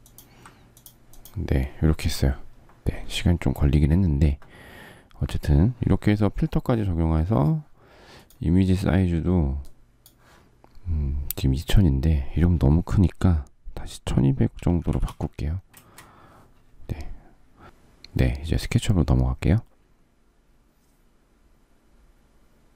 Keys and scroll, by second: 14.3-15.6 typing, 15.8 Return.